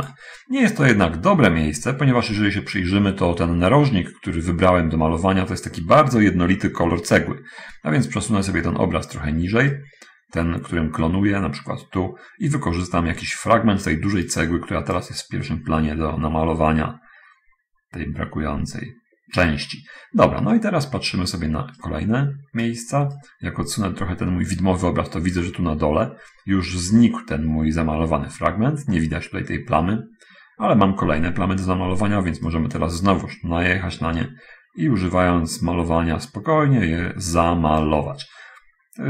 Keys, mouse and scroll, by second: 2.5-3.6 middle drag, 4.3 middle click, 5.1-5.4 scroll up 1, 8.0-9.5 middle drag, 10.1-14.9 right drag, 15.4-19.9 drag, 20.9 middle click, 22.2-23.0 right drag, 23.4-25.1 right drag, 25.8-26.9 middle drag, 29.0-30.5 middle drag, 31.5 middle click, 32.9-37.9 right drag, 38.1-39.0 drag.